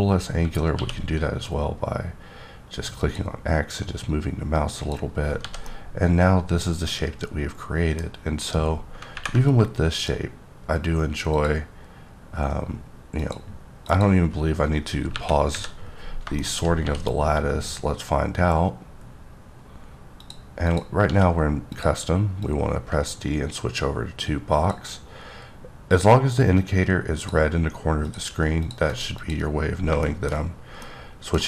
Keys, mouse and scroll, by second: 0.7 q, 3.0 click, 4.8 click, 5.1-5.4 scroll down 1, 5.4 h, 5.7-8.2 middle drag, 8.4 click, 9.9 click, 11.3 click, 13.2 click, 13.8 click, 15.1 KP_1, 15.5 KP_3, 16.4 middle click, 17.9-18.2 scroll, 18.2-19.0 scroll up 2, 19.0-19.7 scroll up 2, 19.7-20.2 scroll down 1, 20.2 click, 20.7 click, 21.1 d, 21.7 click, 22.4 click, 25.9 click, 27.2 double click, 28.0 click, 28.6 click, 29.0 double click, 29.2 click, 29.7 scroll down 2, 30.0 shift+middle click.